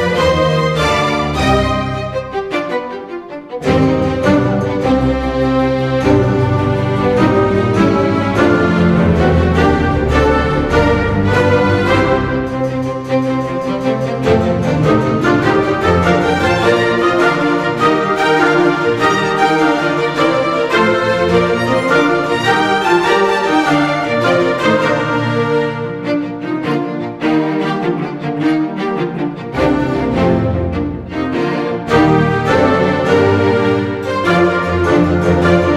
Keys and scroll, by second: 10.7 Delete, 11.0 ctrl+d, 11.3 space, 13.0 space, 13.4 Escape, 14.7 space, 18.1 space, 19.0 Delete, 19.3 ctrl+d, 19.4 space, 23.0 space, 27.3 space, 28.0 space, 28.8 space, 30.5 space, 31.4 Delete, 31.6 ctrl+d, 31.8 space.